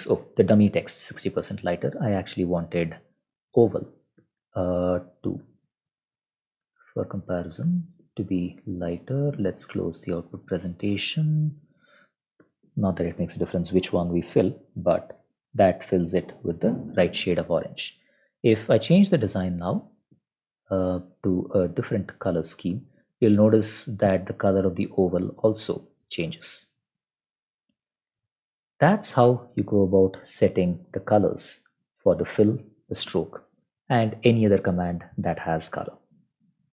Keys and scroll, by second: 4.6 ctrl+Left, 5.0 ctrl+shift+Right, 5.6-7.4 typing, 11.1 Up, 12.2 Up, 12.4 Return.